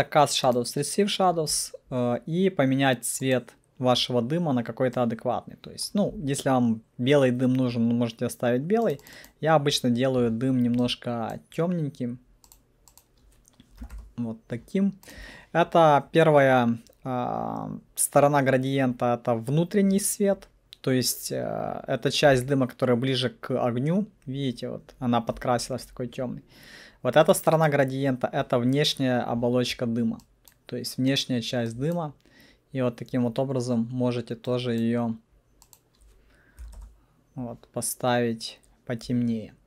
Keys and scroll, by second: 13.9 2, 14.0 Return, 36.7 alt+2, 36.8 Return.